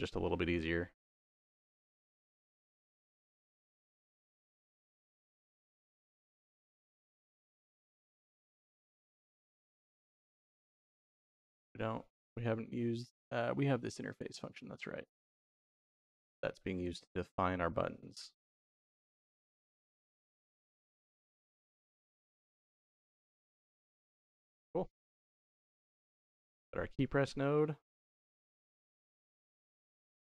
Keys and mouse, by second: 1.2 click, 2.4 shift+click, 3.7 ctrl+KP_4, 4.7 g, 6.4 click, 7.2 middle click, 8.0-10.0 middle drag, 10.7 middle click, 11.4-14.2 drag, 14.8 middle click, 15.7 g, 16.9 middle click, 18.1 g, 19.7 click, 20.7 middle click, 21.3-21.7 drag, 22.5 ctrl+KP_4, 23.4 click, 24.9 middle click, 26.0 click, 26.5 middle click, 27.4-28.5 drag, 29.1 middle click, 29.9 click.